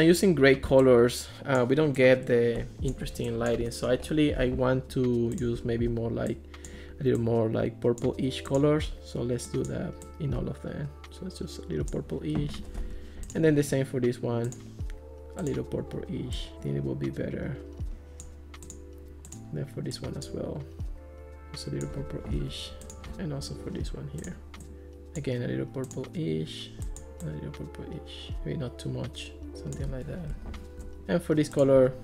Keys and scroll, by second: 12.8 Escape, 22.4 Escape, 30.4 Escape.